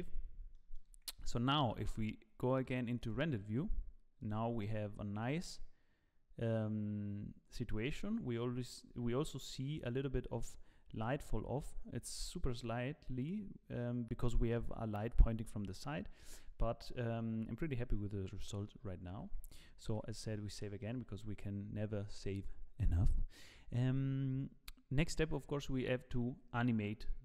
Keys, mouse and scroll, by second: 0.5 shift+middle click, 1.6 z, 2.6 z, 4.2 click, 19.2 z, 19.9 ctrl+s, 20.2-20.6 scroll down 2, 20.6 shift+middle click, 21.2-22.9 scroll down 1.